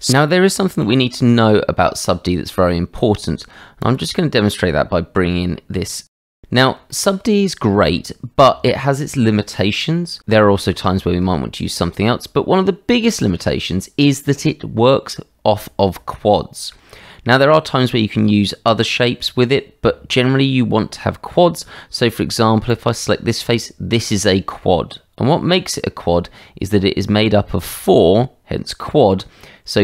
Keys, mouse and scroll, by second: 0.7 shift+a, 5.7 s, 6.9 shift+middle drag, 7.5-8.0 middle drag, 15.8-16.7 middle drag, 18.0 Tab, 22.6 click, 25.2 Tab.